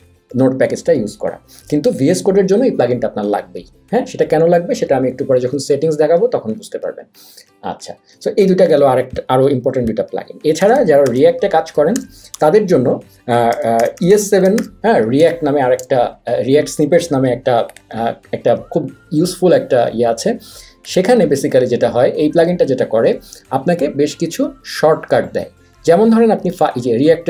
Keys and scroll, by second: 10.3-12.3 typing, 13.5-15.8 typing.